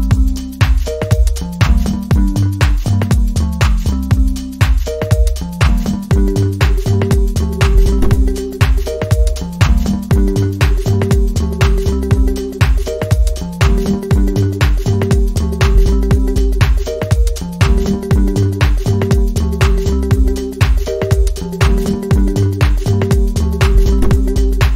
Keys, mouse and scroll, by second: 0.4-1.7 typing, 1.9 Return.